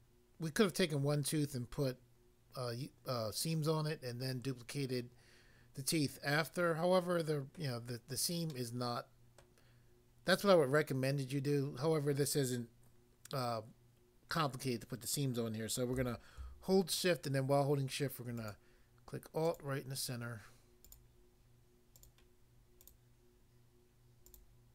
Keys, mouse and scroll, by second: 6.4 middle click, 7.6 middle click, 8.5 middle click, 9.4 middle click, 18.4 alt+click, 18.5 alt+click, 19.4 alt+click, 19.6 alt+click, 20.8 alt+click, 20.9 alt+click, 21.9 alt+click, 22.0 alt+click, 22.8 alt+click, 22.9 alt+click, 24.3 alt+click.